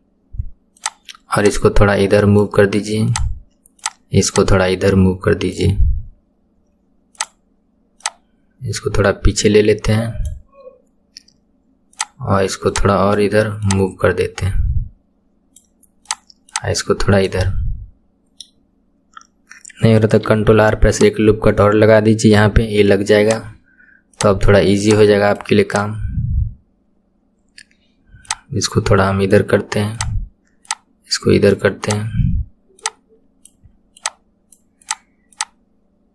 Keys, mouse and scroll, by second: 0.8 click, 1.4 click, 3.1 click, 3.8 click, 4.3 click, 7.1 click, 7.9 click, 11.9 click, 12.7 click, 13.6 click, 16.1 click, 16.5 click, 17.4-20.3 middle drag, 20.3 ctrl+r, 22.4 KP_1, 23.3 click, 24.1 click, 24.8 click, 25.7 click, 28.3 click, 29.9 click, 30.7 click, 31.8 click, 32.8 click, 34.0 click, 34.8 click, 35.3 click.